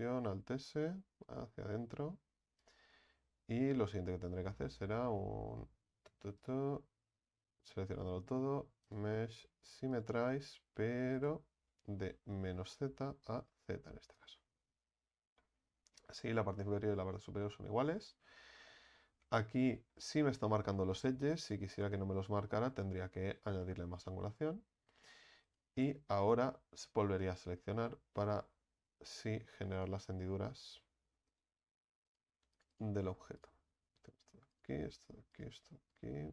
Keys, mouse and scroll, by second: 0.1 alt+s, 3.2 Tab, 4.3 Tab, 7.6 a, 7.8 a, 10.0-14.3 drag, 15.0 Tab, 15.4-16.9 middle drag, 16.9 Tab, 17.4 middle drag, 17.7 Tab, 19.7-20.4 middle drag, 20.4-21.2 scroll up 2, 21.2-22.9 middle drag, 22.9-23.6 scroll down 3, 23.6-24.3 middle drag, 24.3 right click, 24.9 Tab, 25.5 right click, 26.2 alt+shift+right click, 28.2 click, 29.1 right click, 29.8 right click, 31.3 click, 32.1 right click, 32.5 ctrl+alt+shift+right click, 32.7 ctrl+alt+shift+right click, 33.4 ctrl+alt+shift+right click, 34.5 ctrl+alt+shift+right click, 35.3 ctrl+alt+shift+right click, 35.9 ctrl+alt+shift+right click.